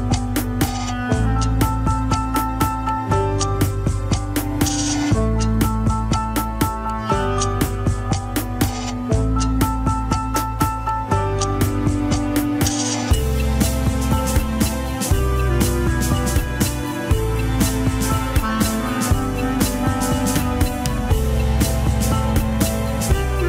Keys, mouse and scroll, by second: 0.2 shift+click, 1.3 ctrl+z, 1.4 shift+click, 2.1 shift+click, 2.5 Tab, 2.7 s, 3.6 Tab, 3.9 click, 4.1 scroll down 2, 4.4 Tab, 4.6 s, 5.0 alt+z, 5.2 KP_1, 5.6 Tab, 6.1-7.2 shift+middle drag, 7.2 scroll down 4, 7.7 click, 8.0 Tab, 8.5 s, 10.2 KP_3, 10.9 g, 12.0 ctrl+z, 12.6 g, 13.1 KP_1, 13.5 scroll up 3, 13.9 Tab, 14.5-15.8 shift+middle drag, 15.8 click, 16.2 Tab, 16.3 s, 16.9 Tab, 17.1 click, 17.2 Tab, 17.4 s, 18.2 Tab, 18.5 click, 18.7 scroll up 2, 18.9 shift+middle click, 19.1 Tab, 19.3 s, 21.2 Tab, 21.4 scroll down 3, 22.7 click, 22.9 scroll up 1, 23.1 Tab, 23.3 alt+z.